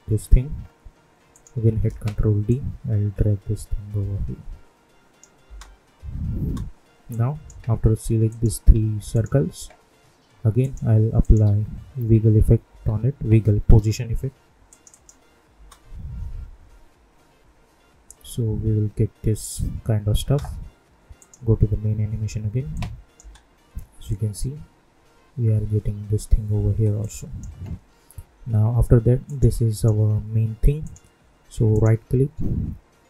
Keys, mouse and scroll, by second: 1.8 ctrl+d, 2.4-5.4 drag, 5.4 space, 7.0 click, 9.1 shift+click, 10.6 click, 11.1 click, 11.4 ctrl+a, 11.7-13.2 typing, 14.6 click, 15.5 space, 20.2 space, 21.1 click, 23.1 space, 26.6 space, 27.0-29.2 drag, 31.7 right click.